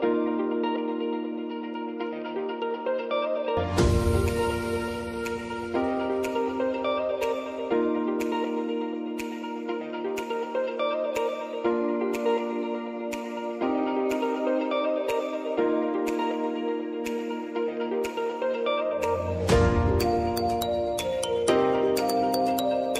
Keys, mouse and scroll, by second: 1.1-9.3 drag, 9.4 click, 9.9 ctrl+alt+Home, 12.5 space, 13.9-15.7 drag, 15.7 p, 16.7-22.9 drag.